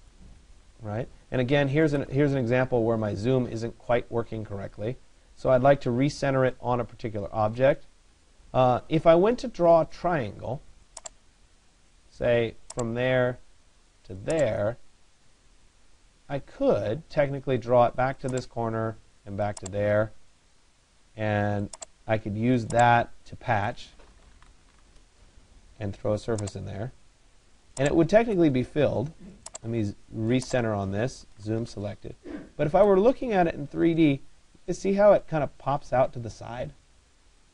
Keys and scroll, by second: 24.5 Return, 31.0 Return.